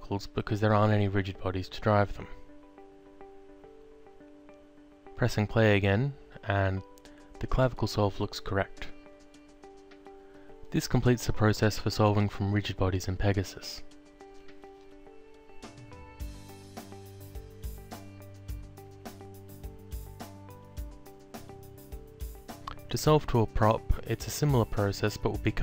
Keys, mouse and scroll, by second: 0.1 click, 0.9 0, 1.4 ., 1.8 9, 2.4 5, 2.9 Return, 3.4 click, 5.4 alt+click, 8.6 alt+click, 11.9 click, 13.4 alt+click, 14.6 alt+click, 18.0 alt+click, 22.7 click, 23.8 alt+click, 24.7 alt+click.